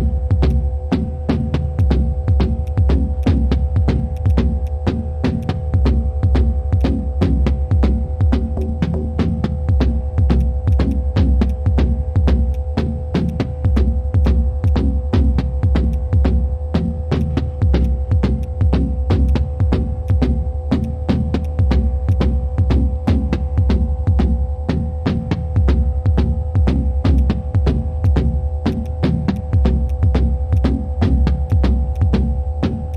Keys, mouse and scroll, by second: 2.6 ctrl+click, 4.1 right click, 6.8 shift+click, 10.7 right click, 11.5 shift+click, 13.1 ctrl+z, 13.8 shift+click, 15.9 shift+click, 23.0 shift+click, 28.7 right click.